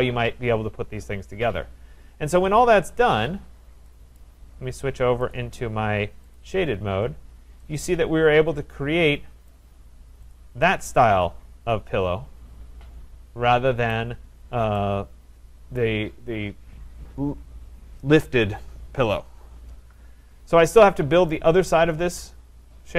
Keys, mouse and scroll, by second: 2.6 click, 4.2 right click, 5.3 click, 6.4 click, 7.2-7.6 scroll, 9.5 right click, 9.7-10.3 scroll, 10.3 click, 13.9 right click, 14.4-14.8 scroll, 15.8 right click, 20.3-20.9 scroll, 21.3 right click, 21.7-22.2 scroll.